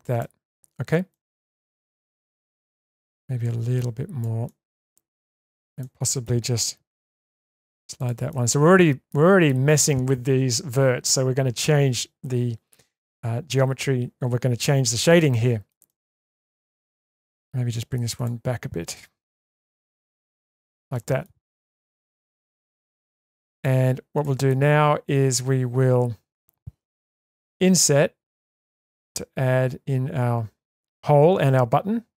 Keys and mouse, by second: 1.1-2.1 middle drag, 2.4 shift+middle click, 3.8 click, 4.4 middle click, 5.5 click, 5.8 middle click, 7.2 g, 8.3-9.4 middle drag, 15.4 middle click, 15.9 shift+middle click, 16.3 middle click, 19.8 g, 20.9 middle click, 21.9 3, 22.9-23.3 middle drag, 24.5-26.3 middle drag, 27.5 i.